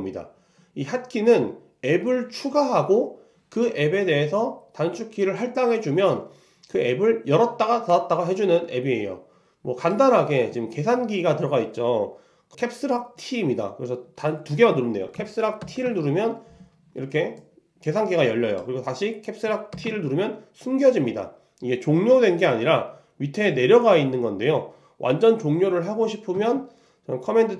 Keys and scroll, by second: 26.4 super+Tab.